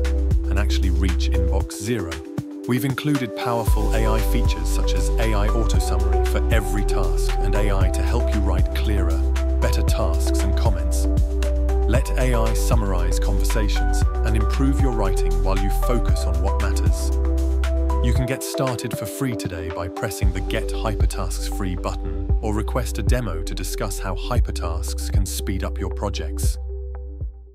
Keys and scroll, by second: 0.8 shift+Tab, 4.8 alt+Tab, 5.3 i.